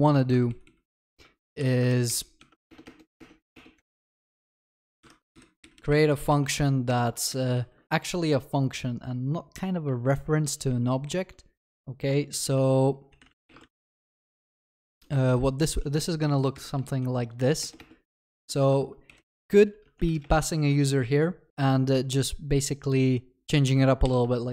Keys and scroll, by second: 1.6 Delete, 2.7 ctrl+BackSpace, 6.9 ctrl+BackSpace, 7.5 ctrl+s, 13.7 ctrl+s, 20.5 ctrl+s, 24.1 ctrl+/, 24.2 ctrl+s.